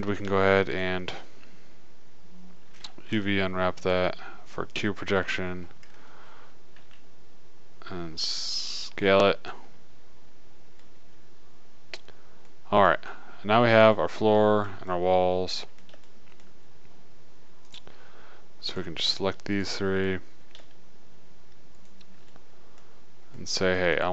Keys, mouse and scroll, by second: 3.0 middle click, 3.5 u, 7.1 s, 9.3 click, 12.2 middle click, 22.6 middle click.